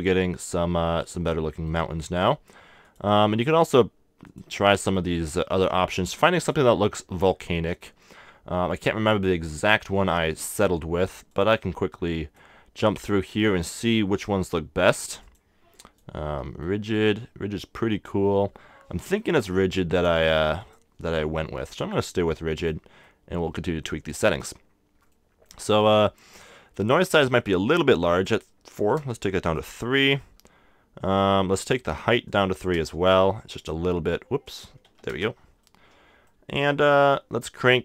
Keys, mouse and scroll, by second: 2.8-4.8 drag, 5.0 middle click, 5.9-8.2 drag, 10.1-12.4 middle drag, 11.3-13.1 drag, 12.9-15.5 middle drag, 15.2-16.9 drag, 16.6-18.4 middle drag, 19.9-21.7 drag, 21.1-24.6 middle drag, 21.9-23.7 drag, 24.8 scroll up 1, 25.0 scroll down 1, 25.1-28.1 middle drag, 28.1-29.8 drag, 29.6-32.6 middle drag, 32.2 click, 32.6 3, 32.7-36.3 drag, 32.9 KP_Enter, 33.8 3, 35.6 right click, 36.3-37.7 middle drag.